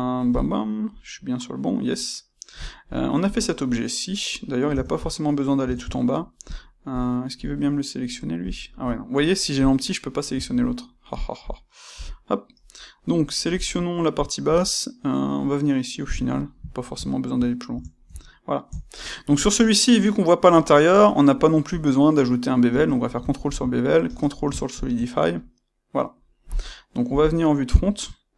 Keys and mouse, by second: 0.3 click, 0.8-6.4 middle drag, 4.6 Tab, 6.4 click, 6.9 click, 8.4 click, 9.5 click, 10.3 Tab, 11.1 click, 11.9 KP_1, 13.5 click, 14.4 g, 16.2 click, 16.6-28.3 shift+middle drag, 17.7 Tab, 22.7 space, 27.1 KP_1.